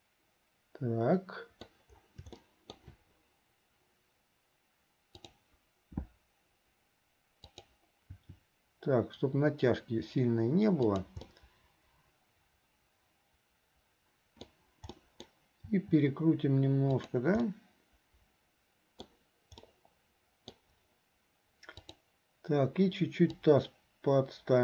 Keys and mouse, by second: 2.6 shift+middle click, 5.2 click, 7.5 click, 8.4 r, 11.3-14.6 middle drag, 15.1 click, 15.1 right click, 17.7-19.3 drag, 17.7-19.1 right drag, 19.8 click, 21.9 click, 23.4-24.6 drag.